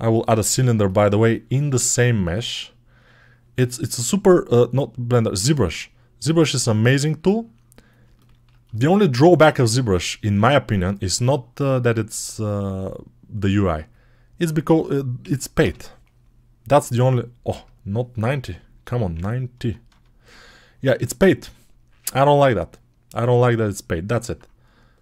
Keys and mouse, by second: 0.0-6.9 ctrl+alt+middle drag, 6.9-22.1 drag, 22.1-25.0 middle drag.